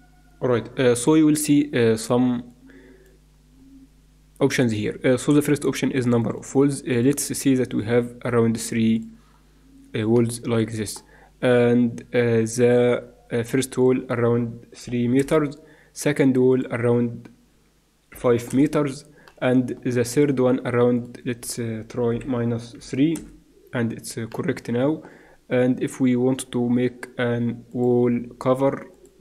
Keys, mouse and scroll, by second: 2.5-3.9 drag, 3.9 middle click, 4.2-5.3 drag, 5.3 middle click, 6.0-10.2 drag, 10.2 middle click, 13.8-15.7 drag, 16.5-18.6 drag, 19.2-21.3 middle drag, 20.9-22.9 drag, 24.3-26.6 middle drag, 27.7-29.2 drag.